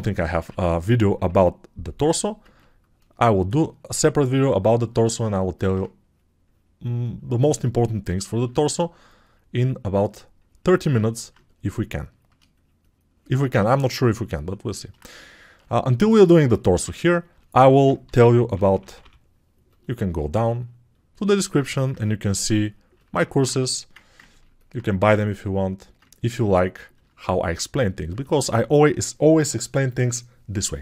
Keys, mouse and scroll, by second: 1.9 [, 2.5 ctrl+[, 24.2 ctrl+alt+i.